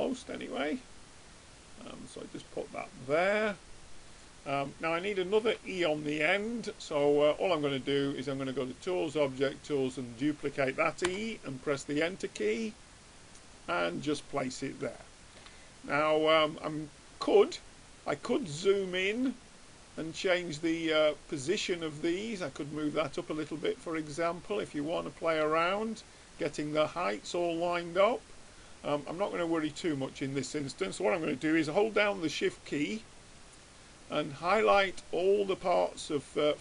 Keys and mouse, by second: 4.1-5.9 middle drag, 7.0 click, 8.3-9.9 drag, 12.5-14.0 drag, 15.1-20.2 middle drag, 21.1-25.7 drag, 24.9-27.7 middle drag, 25.5 right click, 28.7-29.9 middle drag, 29.9-31.5 drag, 33.0-36.6 drag.